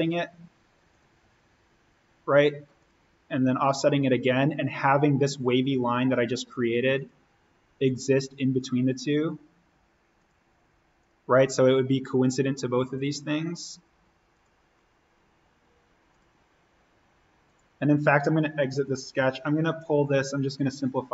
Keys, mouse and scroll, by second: 2.9 click, 6.9 click, 11.3-12.9 scroll down 1, 12.9 click, 19.9-21.1 drag.